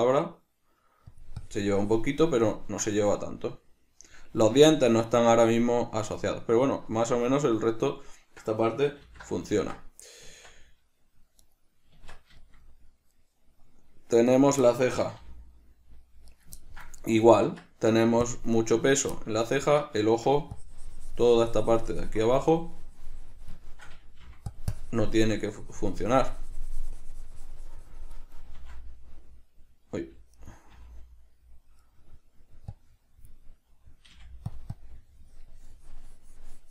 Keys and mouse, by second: 1.7 click, 2.6-11.7 middle drag, 9.3 alt+r, 11.7 right click, 11.8-12.2 middle drag, 12.2 Tab, 12.7-14.5 shift+middle drag, 14.5 right click, 14.9-16.7 middle drag, 15.4 g, 16.7 right click, 16.8-17.3 ctrl+middle drag, 17.3 right click, 17.8 Tab, 19.4-20.8 ctrl+middle drag, 20.8-24.0 drag, 24.0 shift+middle click, 24.5 f, 25.0-30.8 drag, 28.8 f, 30.8 right click, 31.0 g, 32.2 right click, 33.0-34.8 drag, 34.4 f, 35.0-36.7 drag.